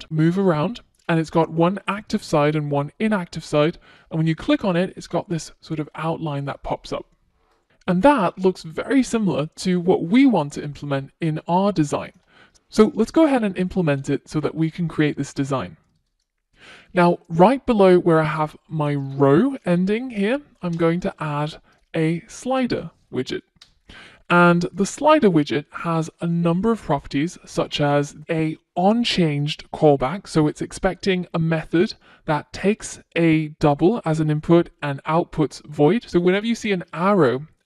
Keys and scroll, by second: 24.0 Return, 28.6 F1.